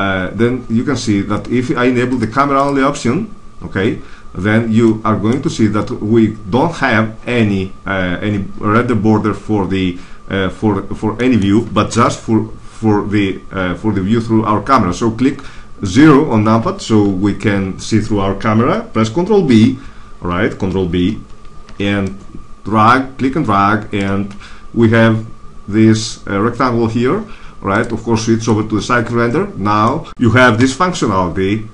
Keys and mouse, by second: 4.0 click, 11.8 KP_0, 19.3 ctrl+n, 21.0 ctrl+b, 27.6-29.5 drag, 30.5 KP_0.